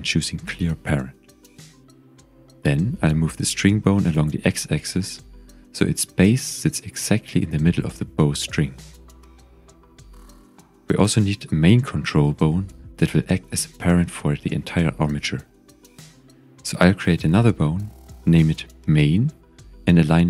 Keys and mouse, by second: 3.1 g, 3.2 x, 4.6 click, 5.1 s, 5.9 click, 6.9 shift+middle click, 7.6 g, 7.7 x, 8.8 click, 9.7 g, 9.9 x, 10.8 click, 12.0 shift+middle click, 14.8 click, 19.1 shift+a.